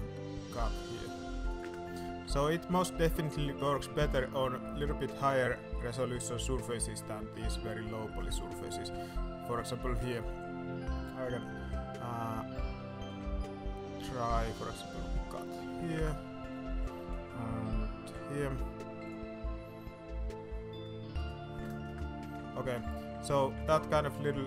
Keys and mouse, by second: 2.2 Tab, 2.5 middle drag, 3.3 middle click, 3.6 shift+middle click, 4.1 alt+a, 4.6 middle drag, 6.6-7.1 middle drag, 7.6-8.0 middle drag, 8.5 middle click, 8.8 shift+middle click, 9.0 Tab, 9.8 alt+a, 10.2 shift+middle click, 13.0 k, 16.8 shift+middle click, 17.1 alt+a, 18.0 k, 22.5 middle click, 22.7 Tab, 23.1 shift+middle drag, 23.6 Tab, 23.7 shift+middle click, 24.1 alt+a.